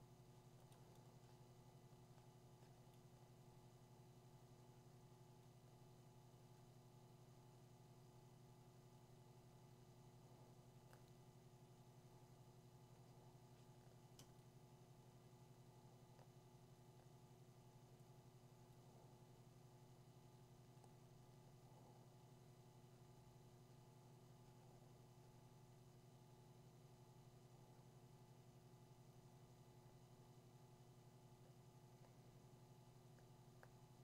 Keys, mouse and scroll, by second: 14.2 ].